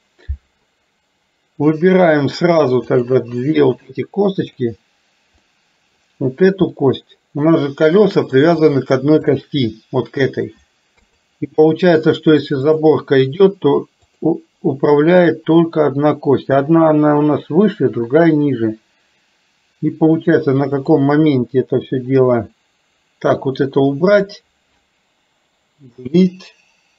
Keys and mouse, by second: 4.4 click, 5.4 middle click, 6.9-8.4 middle drag, 9.3 shift+click, 11.0 KP_3, 12.7 click, 14.0 click, 20.8 click, 23.4 click, 25.9 Delete.